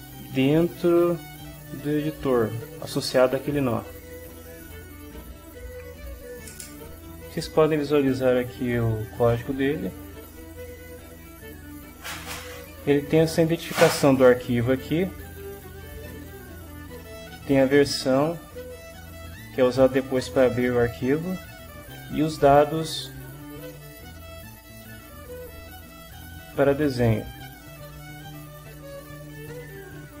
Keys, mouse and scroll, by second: 3.7 click, 4.5 click, 5.5 click, 11.5-13.5 drag, 16.2 click, 20.5-22.4 drag, 24.9-29.3 drag, 29.9 click.